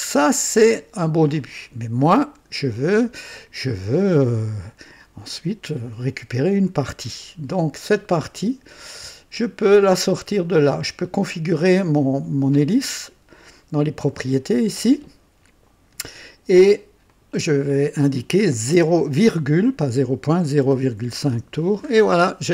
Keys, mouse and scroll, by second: 1.6-2.7 drag, 3.0-4.2 drag, 8.8 click, 9.8 click, 17.1 click, 18.7 KP_0, 20.6 ,, 21.0 KP_5, 21.3 Return, 21.8-22.1 scroll up 1.